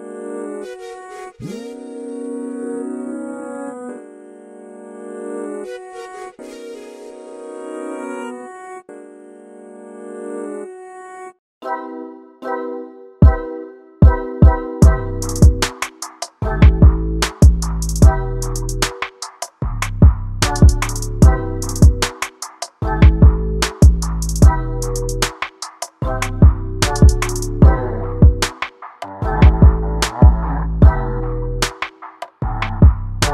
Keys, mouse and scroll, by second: 23.0 click, 23.4 shift+click, 23.8 shift+click, 24.2 shift+click, 24.7 shift+click, 25.3 scroll down 1, 25.7 shift+middle click, 26.0 scroll up 1, 26.3-28.9 middle drag, 28.9 alt+d.